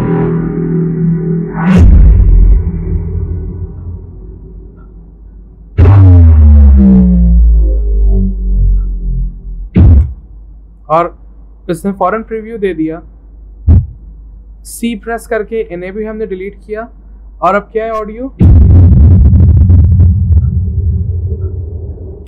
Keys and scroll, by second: 15.7 v, 16.7 Delete.